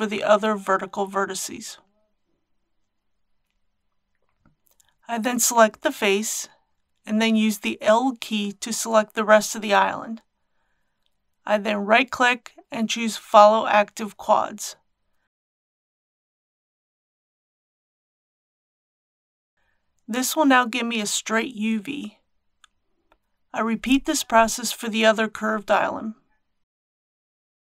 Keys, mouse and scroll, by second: 0.4 shift+s, 1.2 KP_0, 4.1 3, 5.2-6.2 drag, 8.2 l, 10.2 right click, 12.5 click, 13.3 scroll down 1, 15.6 g, 18.2 click, 20.2 shift+middle click, 22.5-22.9 scroll down 1, 22.9 1, 24.2 scroll up 1, 26.6 click.